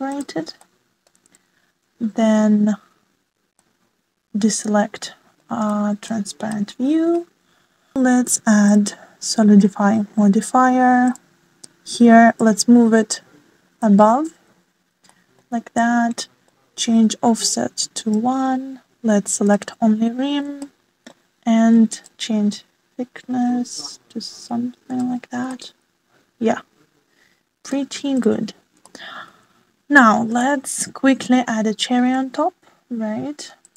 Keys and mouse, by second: 1.7 alt+z, 2.2-4.0 middle drag, 4.4 shift+middle click, 5.1-5.8 middle drag, 8.1-10.5 drag, 11.9-13.3 drag, 14.5-14.9 middle drag, 15.6 shift+middle click, 16.8 middle click, 18.4-19.0 middle drag, 20.4 click, 21.6 shift+middle click, 23.1-26.1 shift+middle drag, 26.5-28.6 middle drag, 29.2 click, 29.8-30.3 shift+middle drag, 31.3-33.0 shift+middle drag.